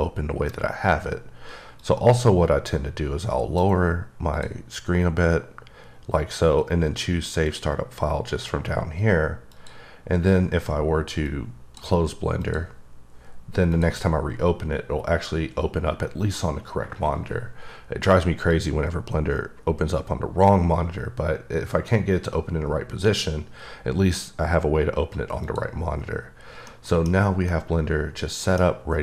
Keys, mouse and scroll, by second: 1.8 click, 3.4 click, 4.3 click, 6.6 click, 7.5 click, 9.5 click, 11.3 click, 12.4 click, 13.7 click, 18.5 click, 20.9-21.9 drag, 25.4 click, 25.9 scroll up 2, 26.7 middle click, 27.5 middle click.